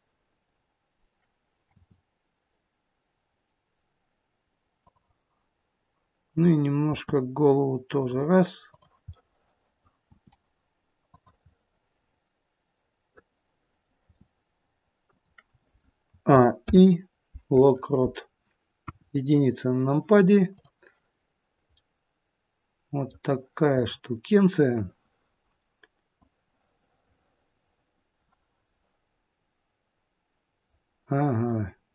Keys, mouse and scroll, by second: 1.6 r, 6.3 click, 6.9 r, 8.6 click, 9.2 middle click, 10.0 r, 11.4 middle click, 14.0 r, 16.0 a, 16.6 i, 18.8 KP_1, 20.5 click, 21.2-21.7 scroll down 1, 21.7 middle click, 22.3 middle click, 23.7-24.2 scroll up 3, 26.2 click.